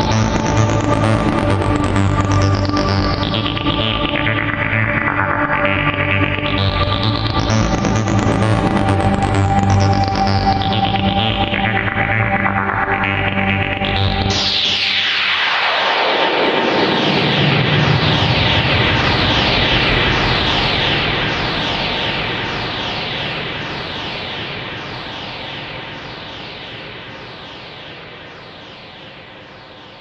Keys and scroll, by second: 0.4 alt+space, 2.0 alt+space, 2.4 alt+space, 2.9 ctrl+z, 3.5 ctrl+z, 4.6 ctrl+z, 6.2 alt+space, 8.4 alt+space, 8.9 alt+space, 9.7 ctrl+z, 12.9 alt+space, 13.3 alt+space, 13.7 alt+space, 14.9 alt+space, 16.6 ctrl+z, 17.1 alt+space, 18.3 alt+space, 18.6 alt+space, 21.7 alt+space, 22.2 alt+space, 23.2 alt+space, 28.6 alt+space.